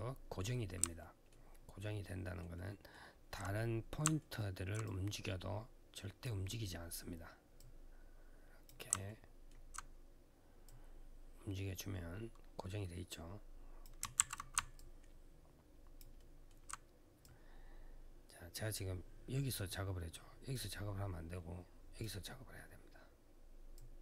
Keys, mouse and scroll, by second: 0.8 alt+middle click, 1.3 alt+scroll down 1, 1.8 alt+middle click, 2.3 alt+middle click, 4.0 alt+middle click, 4.6 click, 7.3 click, 8.8 alt+middle click, 10.4 click, 13.9 ctrl+z, 14.5 alt+click, 15.9 alt+middle click, 17.0 click, 20.3 click, 23.5 click.